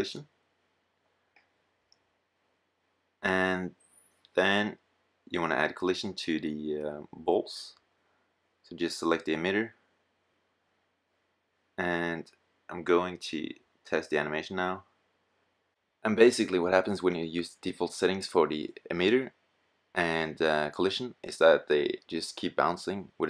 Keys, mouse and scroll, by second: 0.1 middle click, 6.2 drag, 6.4-7.1 drag, 7.7-8.6 middle drag, 10.3-10.6 middle drag, 12.4 click, 12.4 right click, 20.6-22.4 drag.